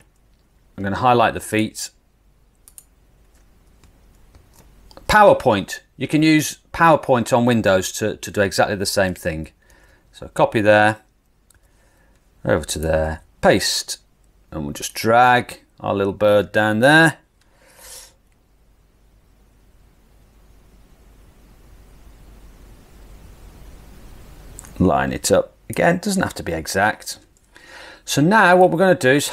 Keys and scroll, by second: 4.4 super+c, 9.8 super+c, 11.6 super+c, 13.1 super+v.